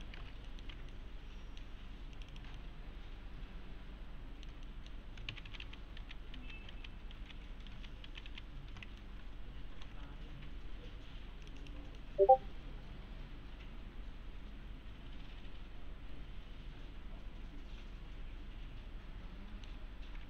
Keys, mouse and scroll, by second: 0.5 middle click, 0.7 scroll down 1, 0.9-1.8 alt+middle click, 2.2 click, 2.6-5.0 alt+middle click, 5.3 ctrl+z, 8.8 z, 9.0-10.0 alt+middle click, 10.6 2, 11.2 2, 11.5 click, 12.0-17.6 alt+middle click, 19.9 1.